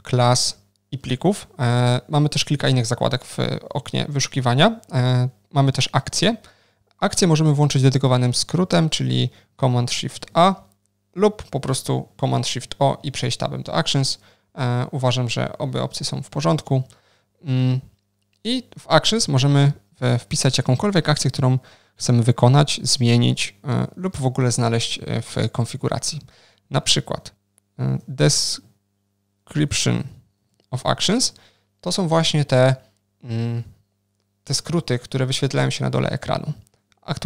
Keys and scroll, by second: 10.2 ctrl+shift+super+a, 12.5 ctrl+shift+super+o.